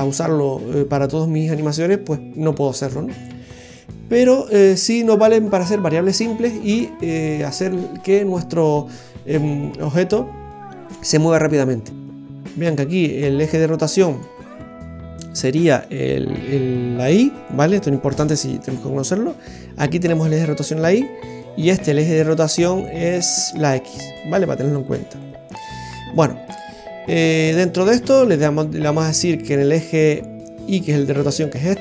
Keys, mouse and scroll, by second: 12.1 right click, 12.6 right click, 15.8 click, 17.3 click, 21.5 right click, 23.5 click, 26.0 right click, 30.8 click.